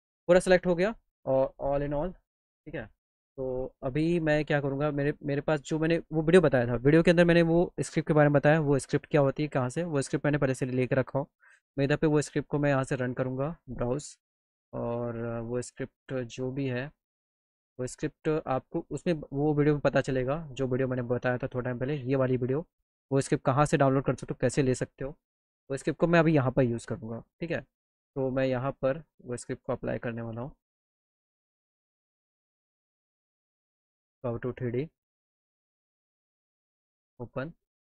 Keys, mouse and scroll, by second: 25.6 click.